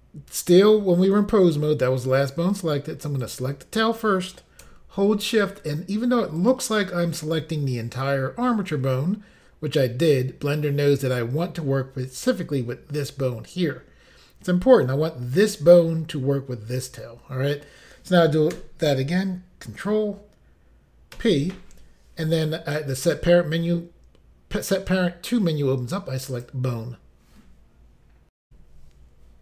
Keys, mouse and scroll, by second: 3.3 click, 6.4 shift+click, 21.2 ctrl+p, 26.4 click, 28.4 Insert.